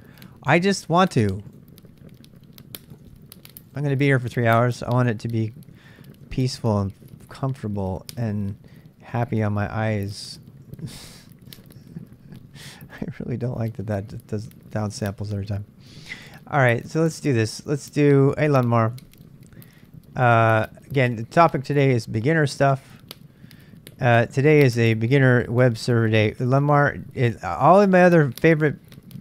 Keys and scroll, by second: 3.0 super+Tab, 4.6 super+Tab, 15.2 super+Tab, 16.1 super+Tab, 17.8-19.6 typing.